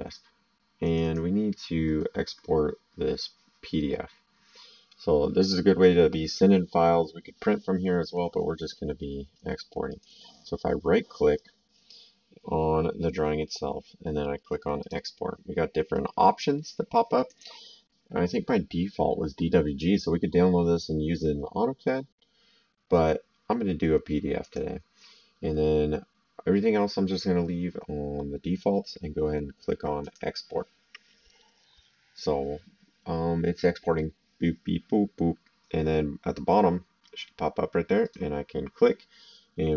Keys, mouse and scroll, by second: 0.8 click, 9.9 right click, 14.8 click, 17.2 click, 24.4 click, 30.0 click, 38.0 click.